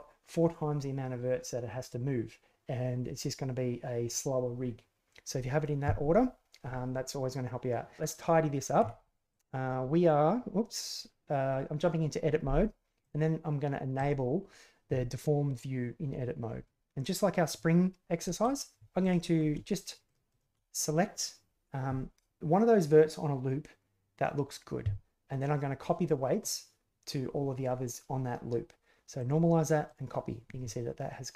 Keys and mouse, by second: 8.1 right click, 8.8 Tab, 13.0 click, 13.9 click, 18.2 shift+click, 19.0 alt+click, 20.0 shift+click, 20.3 shift+click, 29.2 click, 29.8 click, 31.1 middle click.